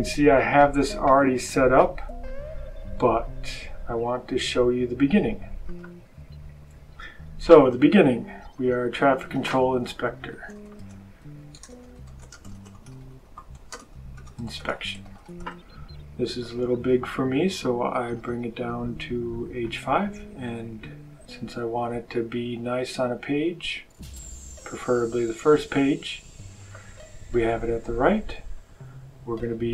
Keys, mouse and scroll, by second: 5.6 click, 7.4 click, 9.0 click, 9.9-15.8 typing, 16.3 click, 18.1 click, 19.5 click, 21.8 click, 26.5 click, 28.4 click.